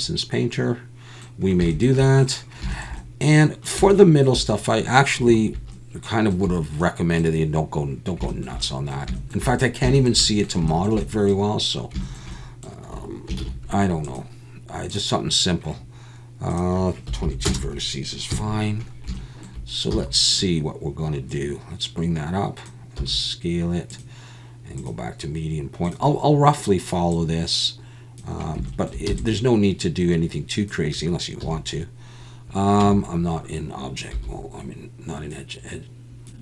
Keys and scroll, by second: 13.4 shift+a, 17.2 2, 18.3 KP_1, 19.9 z, 23.9 s, 29.1 e, 31.4 1, 32.8 Tab, 34.1 1.